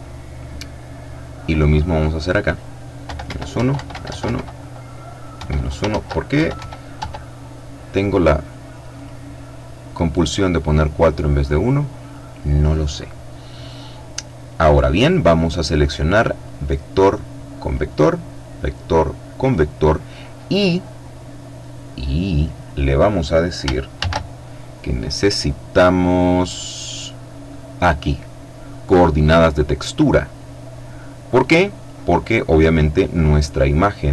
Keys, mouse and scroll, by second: 0.6-1.7 drag, 2.3 KP_Subtract, 2.5 KP_1, 2.7 Tab, 2.9 KP_Subtract, 3.1 KP_4, 3.3 Tab, 3.4 KP_Subtract, 4.5 KP_1, 5.1 shift+Tab, 5.5 shift+KP_Subtract, 5.7 shift+KP_1, 6.1 shift+Tab, 8.1 click, 9.9-11.8 drag, 15.6-17.4 drag, 17.6-19.1 drag, 19.3-22.2 middle drag, 23.1 shift+a, 28.7 click, 29.5-31.5 drag, 33.4-34.1 drag.